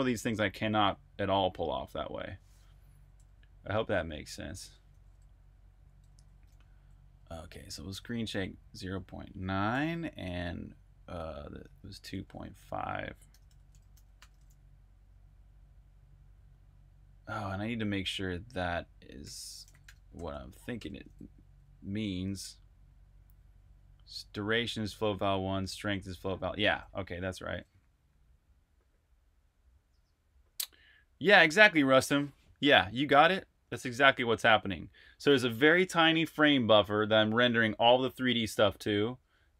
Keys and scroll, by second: 4.7 super+`, 6.0-13.9 typing, 18.8-23.6 typing.